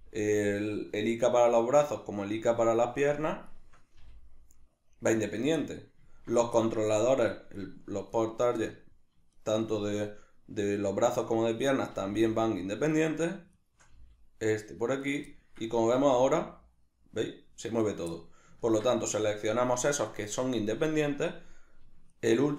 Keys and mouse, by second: 0.4 right click, 1.2 shift+right click, 2.6 shift+right drag, 3.5 shift+right drag, 4.0 g, 5.2 right click, 5.6-7.3 middle drag, 7.3 shift+right click, 7.6 shift+right drag, 8.1 shift+right click, 8.7-9.3 middle drag, 9.3 shift+right drag, 9.7-13.1 middle drag, 11.9 g, 13.5 shift+right click, 13.9 g, 15.1 right click, 15.3-17.9 ctrl+middle drag, 16.1 g, 17.9 right click, 18.1-22.1 middle drag, 20.8 Tab, 22.1 shift+right click.